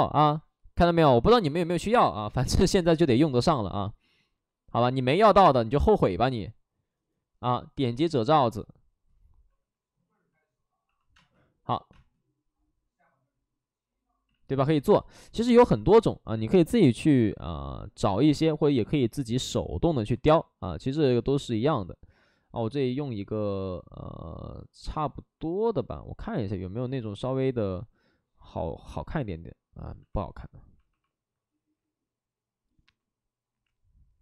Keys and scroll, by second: 10.8 x, 11.0 space, 14.2 ctrl+z, 29.9 ctrl+z.